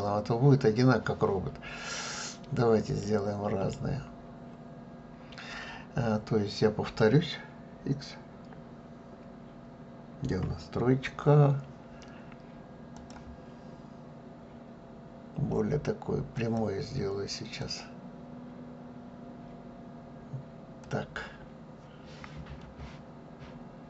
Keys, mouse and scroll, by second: 10.4 KP_3, 12.9-15.9 drag.